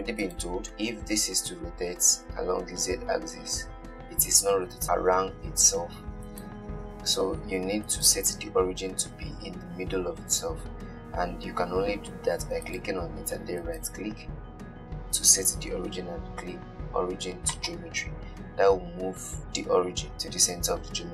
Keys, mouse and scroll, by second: 1.9 r, 8.1-17.0 right drag.